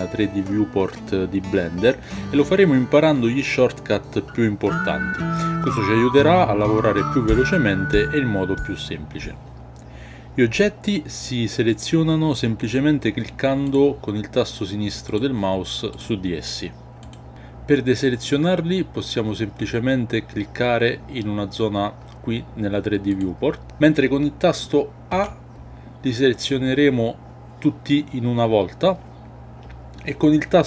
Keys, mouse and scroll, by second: 13.6 click, 15.0 click, 17.0 click, 23.0 click.